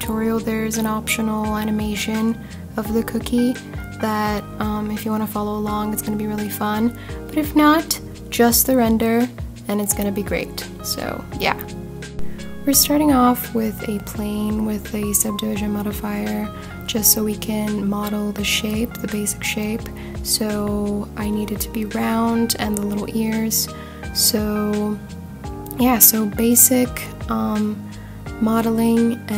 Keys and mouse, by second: 2.9 click, 3.6 click, 4.0-4.8 drag, 6.2 click, 7.4 click, 10.7 s, 11.1 y, 12.3 click, 12.5 s, 12.8 x, 13.2 click, 13.6 s, 13.9 y, 14.8 click, 16.2 Tab, 19.9 ctrl+r, 25.1 click, 27.4 click, 29.3 g.